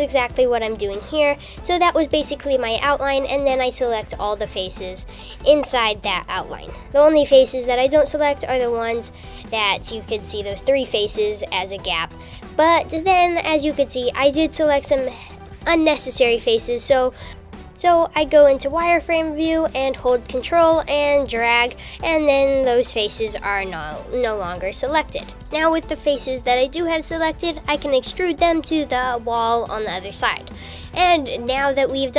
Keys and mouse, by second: 1.8-3.1 shift+drag, 4.2 shift+click, 6.0-7.4 shift+drag, 8.4-9.6 shift+drag, 15.4 shift+z, 18.9-20.1 ctrl+drag, 22.9 shift+z, 29.0 e.